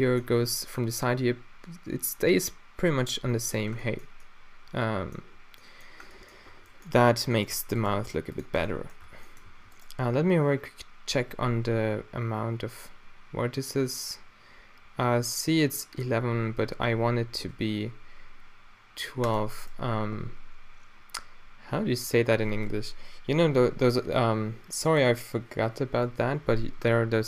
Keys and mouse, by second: 1.7-3.8 middle drag, 6.5 Tab, 7.1 Tab, 7.6 Tab, 7.9 g, 8.4-9.2 middle drag, 8.6 Tab, 9.1 Tab, 9.5 a, 9.8-10.8 middle drag, 10.8 drag, 11.0 drag, 16.7 a, 17.3 ctrl+r, 19.7 click.